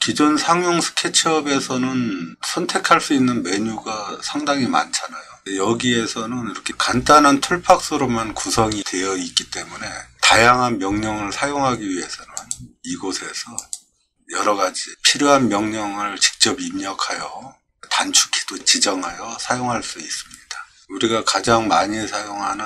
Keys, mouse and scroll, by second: 12.4 click, 13.6 click.